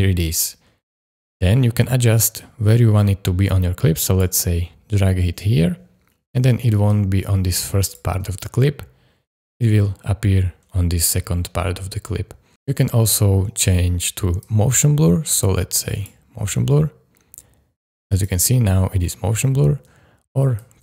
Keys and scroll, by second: 1.1 space, 8.2 space, 18.3 space, 19.9 space.